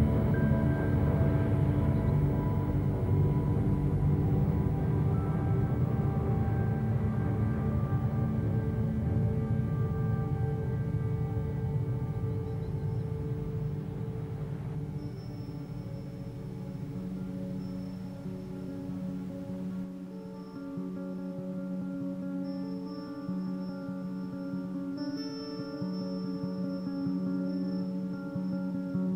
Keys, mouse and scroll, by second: 0.0 KP_1, 2.0-4.4 typing, 5.1 scroll up 1, 5.4 shift+middle click, 5.9-6.4 scroll up 1, 6.4 g, 9.9-12.6 ctrl+right drag, 12.6-13.3 scroll down 5, 13.3 KP_7, 13.9-14.3 scroll up 2, 14.3 shift+middle click, 15.2 click, 15.4 g, 17.3 click, 17.6 g, 19.7 ctrl+right click, 20.2-20.7 scroll down 5, 20.8 a, 21.0 a, 21.2 middle click, 21.4 Tab, 21.7-22.3 scroll down 1, 22.3-22.7 middle drag, 22.7 scroll up 2, 22.9 a, 23.2-23.7 scroll down 2, 23.7-24.6 shift+middle drag, 24.6-25.0 scroll up 1, 25.0-27.1 middle drag, 27.1-27.8 scroll up 1, 27.8 click, 28.2 Tab, 28.6 a.